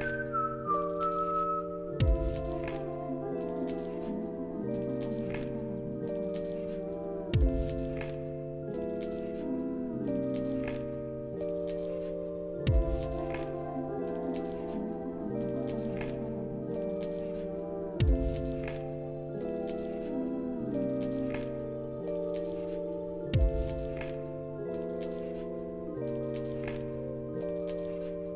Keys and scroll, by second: 5.7 alt+z, 6.4 alt+x, 7.8 t, 10.9 ctrl+s, 12.4 Delete, 24.5 u, 28.2 0.